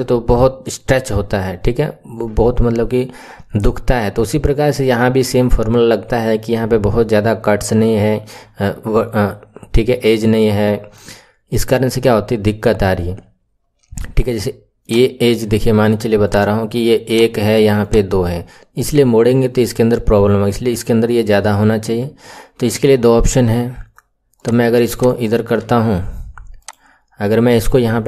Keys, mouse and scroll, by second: 14.7 click, 16.2 click, 17.7 click, 21.8 Tab, 24.3-25.6 drag, 25.6 Tab, 26.5 click.